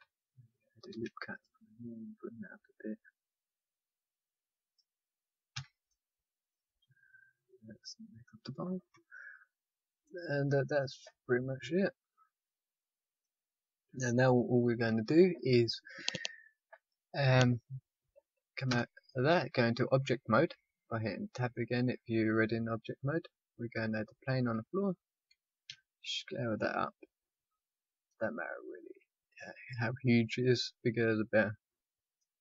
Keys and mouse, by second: 0.8 ctrl+r, 5.5 a, 8.9 KP_5, 18.7 Tab, 22.8-25.6 drag, 25.6 s, 28.7 click, 32.2-32.4 drag.